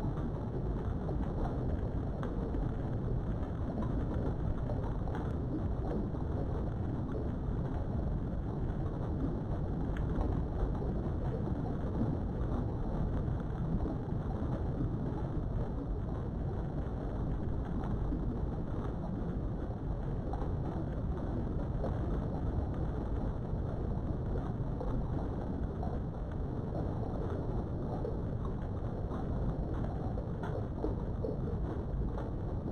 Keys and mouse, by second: 0.2 Tab, 1.3 click, 1.9 click, 2.8 s, 4.8 click, 5.3 shift+middle click, 6.5 ctrl+z, 7.5 shift+click, 8.0 s, 8.6 right click, 9.4 s, 9.9 right click, 12.3 click, 14.5-19.2 drag, 19.7 s, 24.0 click, 27.9 click, 29.3 s, 30.5 right click, 31.8 s, 32.1 x.